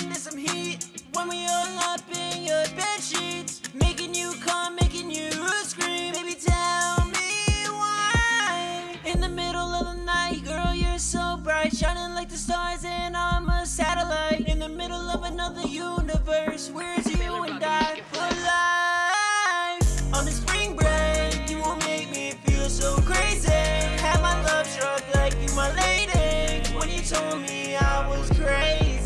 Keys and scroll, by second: 0.0-0.3 typing, 4.6-6.8 typing, 15.5-16.7 typing, 18.4-19.1 typing, 21.3-22.9 typing, 24.0 typing, 27.1-29.0 typing.